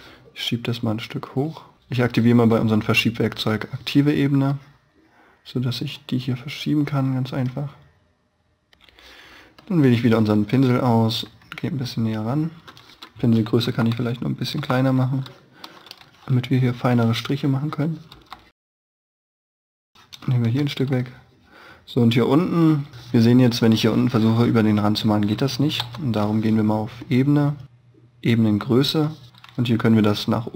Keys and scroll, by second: 13.6 å, 18.1 e, 19.4 space, 19.7 e, 20.2 space, 20.8 b, 25.7 ctrl+z.